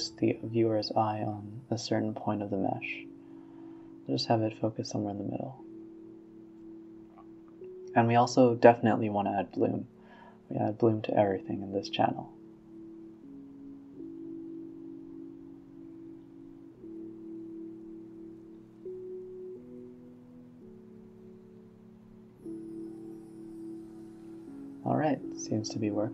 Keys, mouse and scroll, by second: 0.3-1.2 scroll up 1, 1.2-2.8 drag, 2.8-3.3 middle drag, 3.3 g, 4.5 KP_0, 5.8-7.5 drag, 10.3-12.6 typing, 10.8-11.1 scroll up 4, 11.1 scroll down 3, 11.9-12.3 drag, 13.1-14.9 drag, 15.6-17.3 drag, 18.4-22.5 drag, 22.8 space, 25.2 space, 25.7 space.